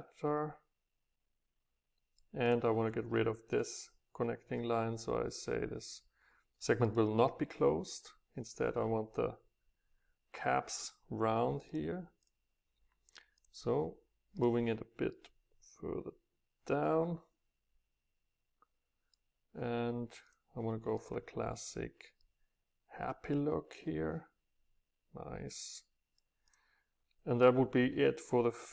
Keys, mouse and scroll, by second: 0.4-2.3 drag, 2.3-4.5 middle drag, 7.0 click, 7.5-8.9 middle drag, 11.8-14.4 drag, 14.4-15.6 middle drag, 17.5-20.2 middle drag, 20.2-22.1 drag, 22.1 middle click, 23.6-25.9 middle drag, 26.5 click.